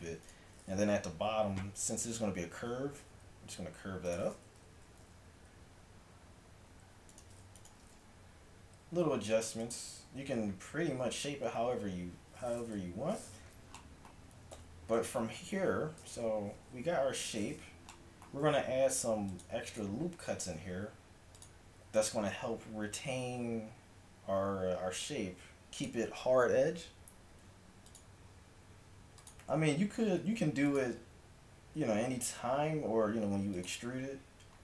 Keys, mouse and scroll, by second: 0.3-1.3 drag, 3.0 g, 5.1 a, 5.1 z, 7.8 g, 14.6 a, 15.7 KP_5, 16.9 KP_5, 18.9 ctrl+r, 20.6 ctrl+r, 27.3 ctrl+r, 30.2 ctrl+r.